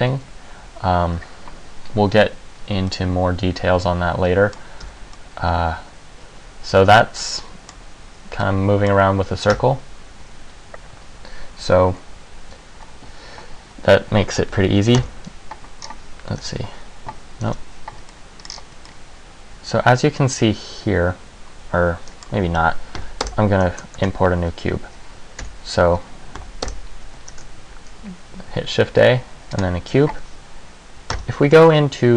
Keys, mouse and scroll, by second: 3.0 middle click, 5.0 Tab, 5.3 middle click, 8.6 middle click, 9.6 Tab, 15.2 KP_1, 16.0-16.6 scroll down 1, 16.6 scroll down 1, 16.6 KP_5, 17.6 KP_5, 18.3 middle click, 18.7-19.2 scroll down 2, 19.0 middle click, 23.2 Delete, 24.2 shift+a, 25.6 Tab, 26.6 Delete, 27.4 shift+a, 31.3 KP_1.